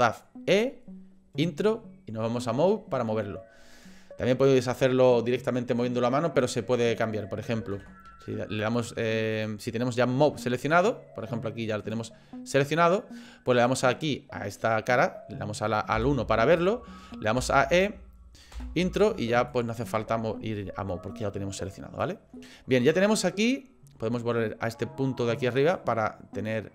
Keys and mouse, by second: 7.7 ctrl+z, 9.3 click, 10.4-11.8 middle drag, 11.9-13.0 drag, 13.5 click, 15.9 KP_1, 17.4 e, 19.5-22.0 drag, 22.3-23.5 middle drag, 25.7 click.